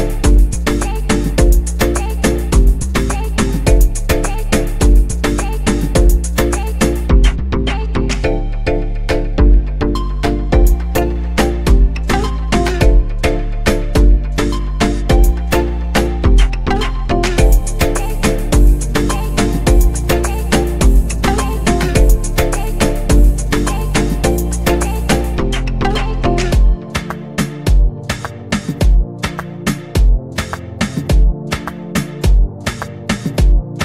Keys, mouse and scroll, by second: 1.2-3.7 scroll down 5, 3.7-7.1 drag, 7.1-9.5 scroll down 2, 9.5 click, 10.1-10.8 scroll down 1, 10.8-17.2 drag, 18.3-21.7 drag, 21.7 KP_0, 23.9 click, 28.2-32.0 drag, 33.6 click.